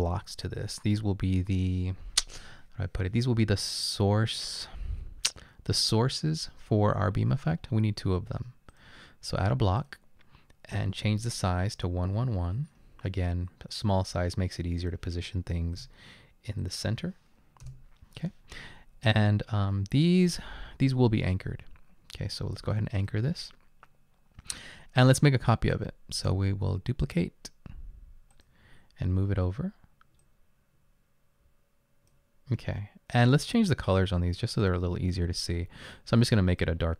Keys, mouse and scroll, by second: 15.8 1, 16.9 typing, 17.6 Return, 19.0 typing, 21.4 typing.